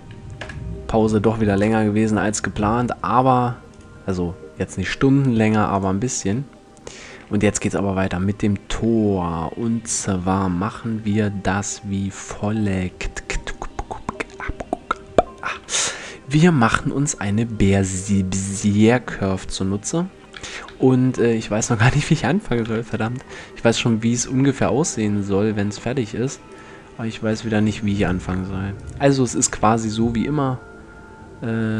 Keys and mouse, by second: 0.0 F11, 1.2 KP_0, 2.0-3.4 middle drag, 4.7 right click, 5.4 click, 6.8 a, 10.3 KP_7, 15.2 KP_1, 16.2 middle click, 16.5 middle click, 16.6 middle click, 20.4 KP_7, 22.2 KP_5, 24.0 shift+a, 27.2 Tab, 29.0 shift+s.